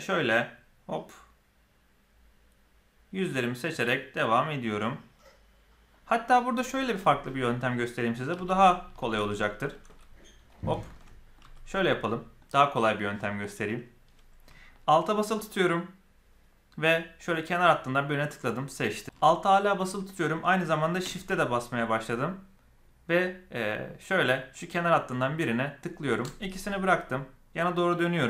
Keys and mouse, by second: 9.0 alt+a, 10.9 middle click, 11.3 z, 12.0 middle click, 13.1 middle click, 17.1 alt+click, 24.4 alt+shift+click, 26.5-27.7 middle drag.